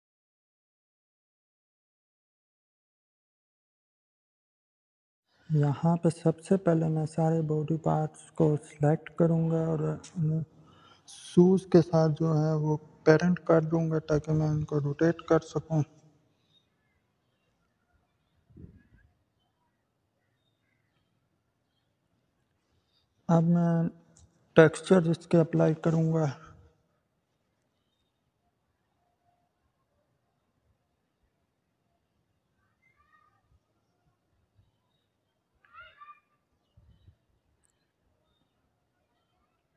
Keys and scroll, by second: 14.5 ctrl+p, 19.8 0, 20.4 Return.